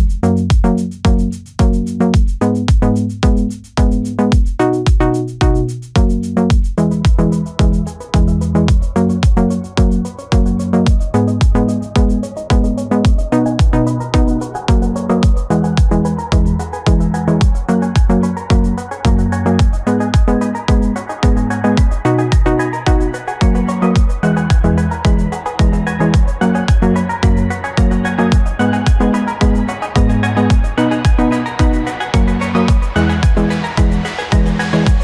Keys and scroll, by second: 7.0 ctrl+-, 10.5 ctrl+-, 13.7 ctrl+-, 14.9 ctrl+-, 17.9 ctrl+-, 18.3 ], 20.3 ctrl+-, 22.7 space.